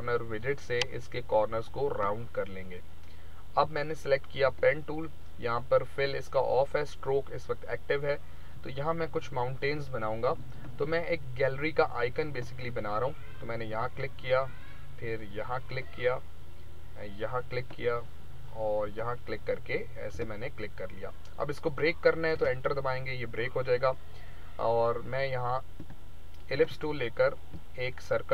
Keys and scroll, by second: 22.3 Return.